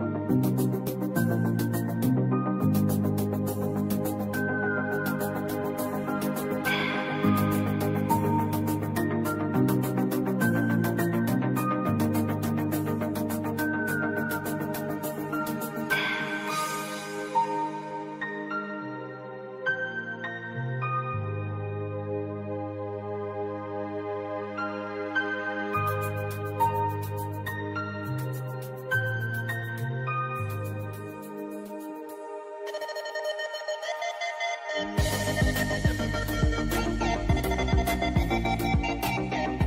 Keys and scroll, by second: 4.9 i, 7.7 v, 11.5 Escape, 12.1 v, 13.2 i, 17.1 v, 22.3 shift+b, 22.7 u, 24.8-33.4 typing, 32.9 Return, 34.8-39.6 typing.